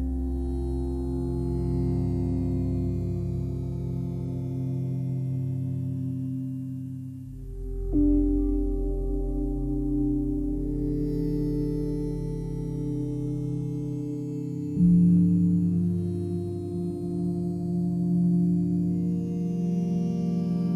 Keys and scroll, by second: 15.2 ctrl+j, 16.5 v.